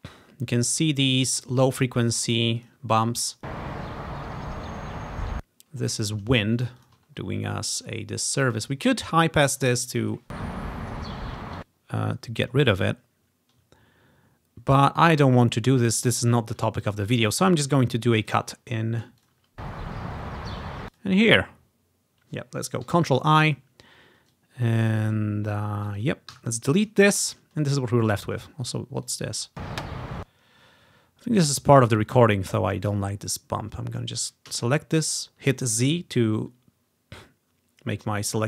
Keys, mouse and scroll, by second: 2.3 ctrl+scroll down 2, 2.6 click, 3.2 space, 5.5 ctrl+scroll down 1, 6.4 scroll down 2, 6.8-10.3 ctrl+drag, 7.2 scroll up 2, 10.1 space, 11.5 space, 11.8 ctrl+scroll down 1, 12.9-14.8 ctrl+scroll down 2, 15.3-16.3 scroll up 1, 16.3-18.3 scroll down 1, 18.3 click, 18.6 ctrl+scroll up 1, 19.3 click, 19.4 space, 19.6-20.5 scroll up 1, 20.5-21.0 ctrl+scroll down 1, 21.1 ctrl+click, 22.9 ctrl+i, 23.6 click, 24.9-25.9 drag, 26.0-27.2 drag, 26.4 Delete, 27.2-27.7 ctrl+scroll down 2, 28.5-28.9 ctrl+scroll up 2, 28.9-30.1 typing, 29.1-31.0 drag, 31.0 ctrl+scroll down 1, 31.9 ctrl+scroll up 2, 33.0-35.8 drag, 33.1-34.6 typing.